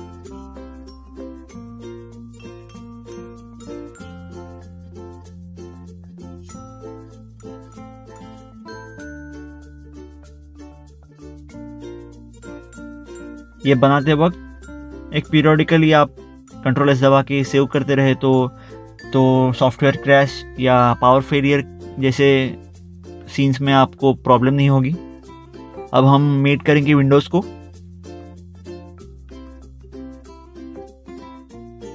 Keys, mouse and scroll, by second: 0.0 click, 1.7 click, 3.9 click, 5.8 middle click, 6.8 middle click, 7.4 ctrl+Tab, 8.4 ctrl+Tab, 9.3 middle click, 10.3 middle click, 10.7 ctrl+s, 12.3-14.9 typing, 15.0 Return, 15.1 middle click, 15.8 middle click, 16.2 scroll up 1, 16.4 scroll down 1, 17.0 Return, 17.5 click, 19.2 scroll down 1, 19.7 click, 20.2 scroll down 1, 20.8 ctrl+click, 21.2 ctrl+click, 21.5 ctrl+click, 21.6 scroll down 1, 23.9 click, 26.9 right click, 27.1 scroll up 1, 28.4 middle click, 29.5 middle click, 29.7 scroll down 1, 31.2 click, 31.5 scroll up 1.